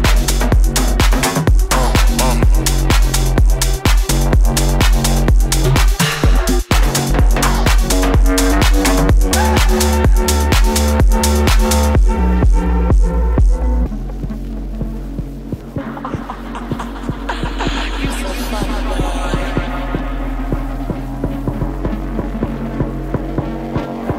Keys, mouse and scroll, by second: 1.7-3.2 scroll down 2, 7.4 click, 8.0 click.